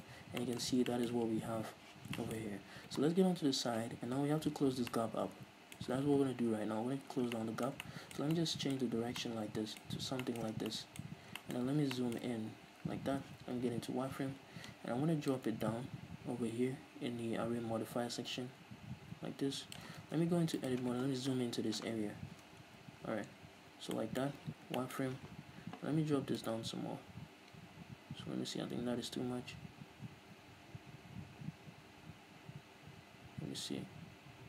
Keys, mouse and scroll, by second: 0.3 scroll up 2, 0.9 scroll down 2, 2.6-3.4 scroll up 2, 3.4 KP_3, 4.1-5.1 scroll up 1, 7.3 scroll up 1, 9.1 scroll down 1, 10.0 scroll up 1, 10.7 scroll down 2, 11.2-12.1 scroll up 4, 12.5-13.4 scroll down 2, 13.4 z, 15.6-20.7 drag, 20.2 Tab, 20.7 right click, 21.6 KP_Decimal, 22.0-23.7 scroll down 4, 22.5 Tab, 23.7 z, 24.1-26.5 middle drag, 24.4 z, 24.6 scroll up 2, 26.5-34.4 drag.